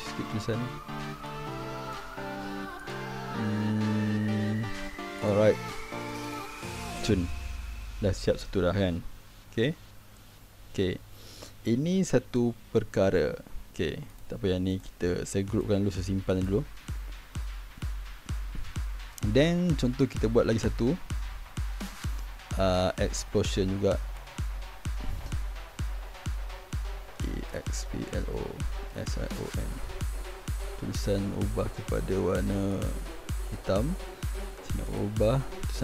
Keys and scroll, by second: 17.5 ctrl+g, 26.7 ctrl+shift+g, 26.9-30.1 typing, 31.0 ctrl+a.